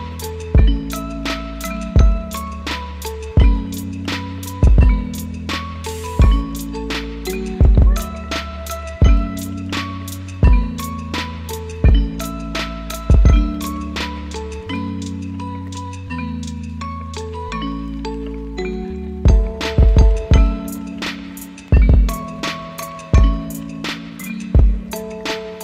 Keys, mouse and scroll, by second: 2.2 ctrl+c, 3.6 ctrl+v, 4.8 ctrl+shift+d, 5.6 Delete, 8.0 alt+[, 24.4 u, 25.1 u.